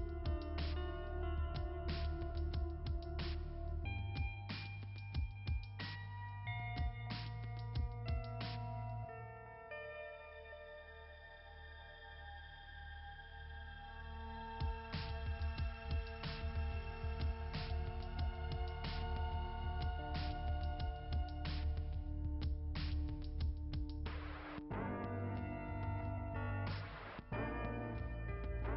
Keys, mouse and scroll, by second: 2.0 double click, 3.0 click, 3.1 click, 5.2 click, 5.3 click, 5.6 Delete, 6.8-7.5 scroll up 2, 7.5 click, 8.8 click, 14.4 click, 14.9 Delete, 15.7 right click, 16.8 click, 18.1 right click, 20.2 click, 22.0 click, 27.9 scroll down 2.